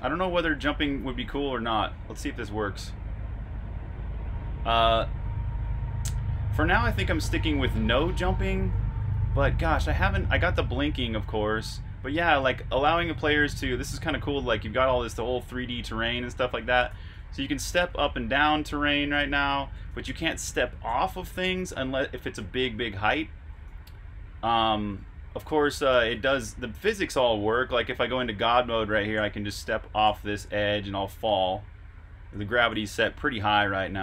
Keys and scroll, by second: 0.6 super+r, 0.7-1.8 typing, 7.1-10.6 typing, 12.3-16.5 typing, 23.9-24.6 typing, 31.0 typing, 32.2-34.0 typing.